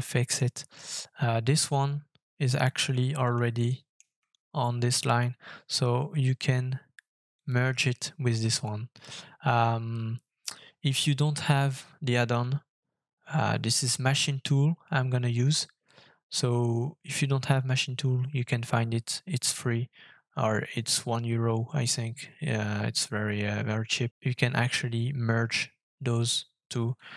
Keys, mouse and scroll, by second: 2.6-3.3 scroll up 1, 3.6 shift+middle click, 7.3 shift+click.